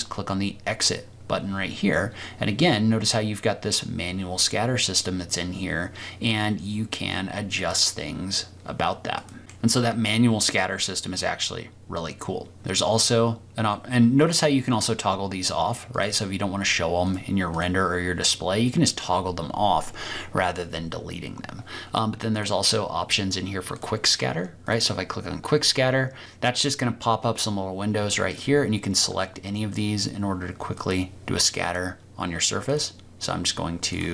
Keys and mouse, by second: 7.6 click, 9.4 click, 14.7 click, 17.0 click, 17.5 click, 22.3 click, 23.7 click, 24.6-28.5 drag, 30.8-31.7 drag, 32.7-34.1 drag.